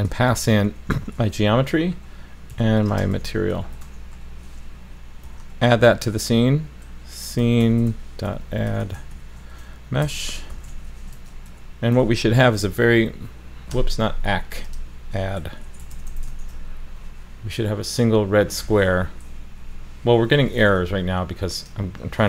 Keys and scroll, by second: 12.0 super+s, 16.3 super+s.